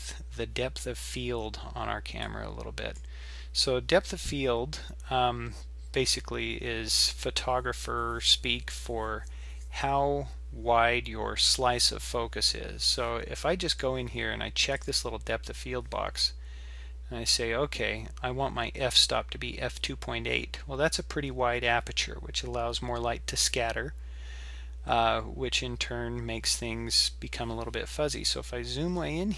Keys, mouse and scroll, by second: 2.2 click, 2.3 click, 4.1-4.7 scroll down 1, 4.7-5.3 scroll up 2, 5.3-6.0 scroll down 1, 6.0-9.0 scroll up 1, 13.7 click, 14.8 click, 28.1-29.1 scroll up 13.